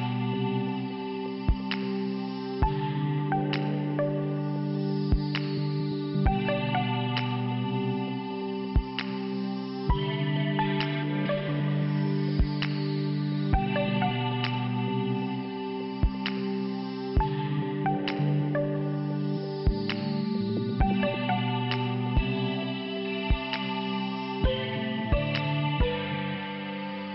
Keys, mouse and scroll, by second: 1.0 click, 1.1 click, 3.2 click, 3.2 click, 4.9 c, 6.4 click, 6.5 click, 7.7 click, 7.9 click, 9.1 click, 9.3 click, 10.2 5, 12.2 click, 12.3 click, 12.9 click, 13.1 click, 13.8 click, 13.9 click, 15.5 click, 17.1 click, 17.2 click, 18.2 click, 18.4 click, 19.4 click, 19.5 click, 20.2 click, 20.4 click, 22.1 scroll up 1, 23.1 right click.